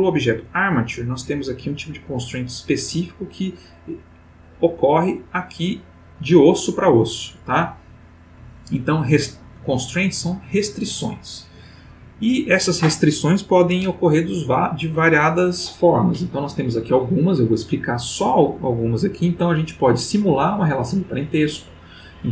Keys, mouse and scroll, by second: 2.1 click, 5.9 click, 9.5 click.